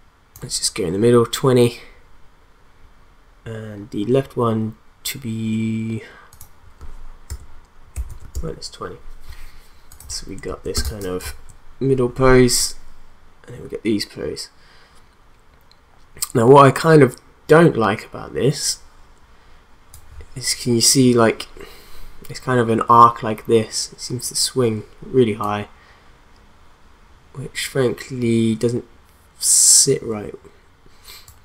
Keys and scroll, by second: 7.7-8.7 typing, 10.7 space.